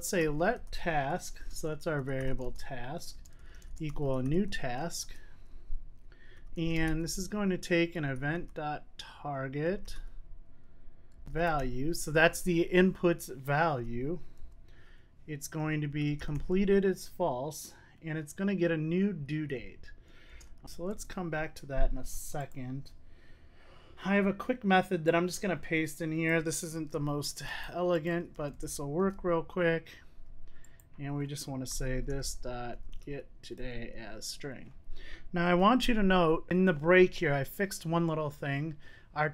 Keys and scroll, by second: 29.1 super+c, 29.2 super+v, 33.6 Return, 35.4 Return, 37.0 super+s.